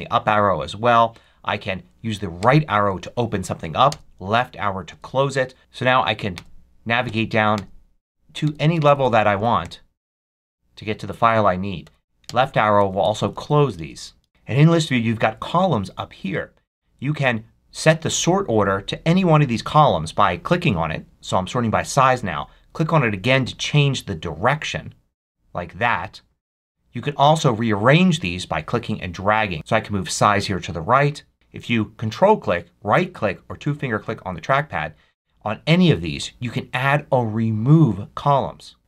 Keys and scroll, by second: 1.1 Down, 2.3 Right, 3.8 Left, 4.8 Down, 5.6 Up, 6.3 Right, 7.0 Down, 7.4 Right, 8.3 Down, 9.5 Right, 10.1 Down, 11.7 Up, 12.2 Left, 12.7 Up, 13.7 Left, 14.2 Up.